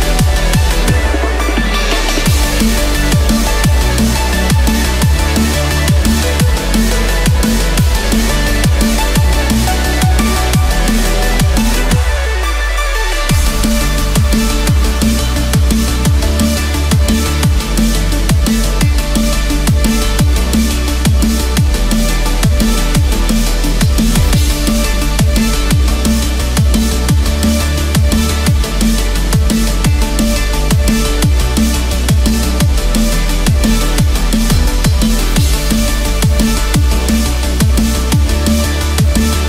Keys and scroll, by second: 14.7 ctrl+-, 16.5 ctrl+=, 18.0 ctrl+=.